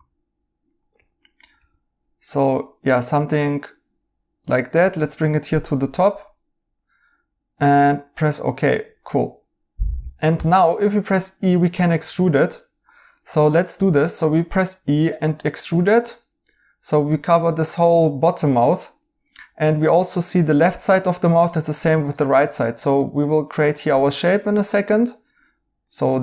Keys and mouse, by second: 0.0-2.0 typing, 9.1 right click, 10.3 e, 12.1 ctrl+z, 13.7 e, 21.6 right click.